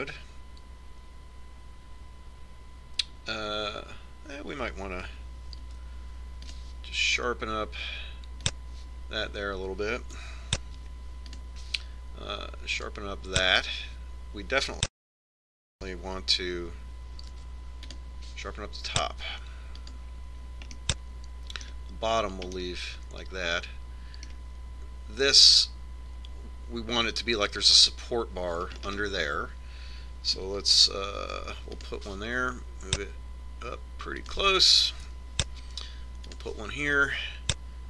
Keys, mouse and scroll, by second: 0.0 middle click, 7.6 ctrl+r, 12.7 ctrl+r, 18.3 ctrl+r, 21.7-25.5 middle drag, 29.9-32.0 middle drag, 32.3 ctrl+r, 36.6 ctrl+r.